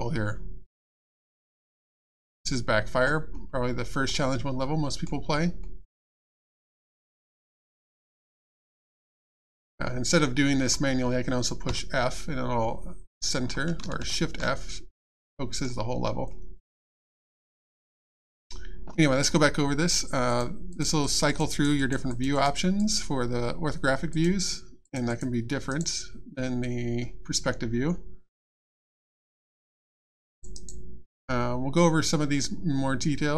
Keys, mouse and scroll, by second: 0.9 click, 3.3 middle click, 4.6 middle click, 6.2 scroll up 1, 7.1 scroll up 1, 7.9 scroll up 1, 8.4 middle click, 10.2 middle click, 12.6-13.0 scroll down 1, 14.0 shift+f, 16.3 middle click, 17.9-19.0 scroll up 1, 20.3 click, 21.5 click, 22.8 click, 24.1 click, 25.7 right click, 29.5 click, 30.3 right click.